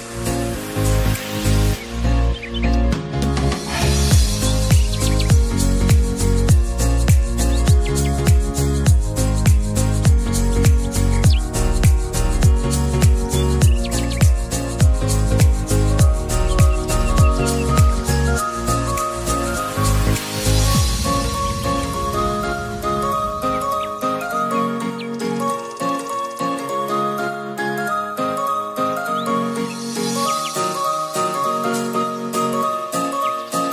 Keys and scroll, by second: 1.2-2.0 typing.